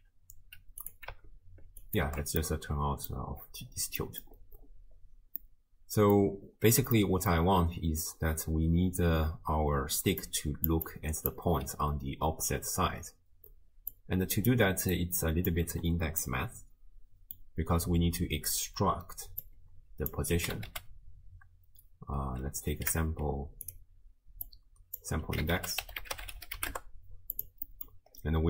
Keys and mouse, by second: 2.0 ctrl+alt+right click, 2.4 click, 2.4 middle click, 2.4 right click, 4.0 click, 4.0 middle click, 4.0 right click, 5.5-6.2 drag, 5.5-6.2 middle drag, 5.5-6.2 right drag, 7.0-7.3 shift+drag, 8.3-12.0 typing, 10.3 click, 10.9 click, 14.0 click, 15.0 click, 16.3-17.4 middle drag, 19.4-23.7 drag, 24.5-27.4 drag, 27.7 middle click.